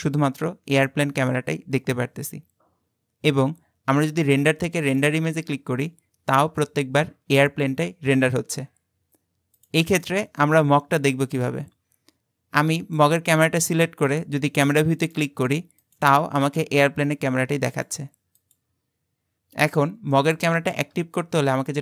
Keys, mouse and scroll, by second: 4.2-7.4 drag, 10.0 middle click, 10.5-13.0 scroll down 5, 13.0 click, 15.0 click, 15.8 click, 16.4 click, 17.0 click, 17.7 click, 18.4 click, 20.2-21.2 shift+middle drag, 21.2-21.8 scroll up 12.